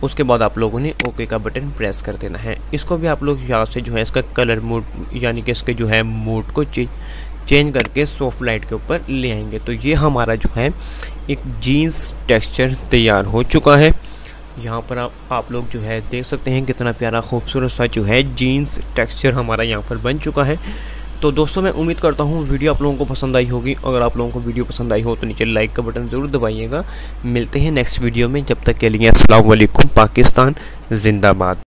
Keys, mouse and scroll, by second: 1.0 click, 7.9 click, 14.4 0.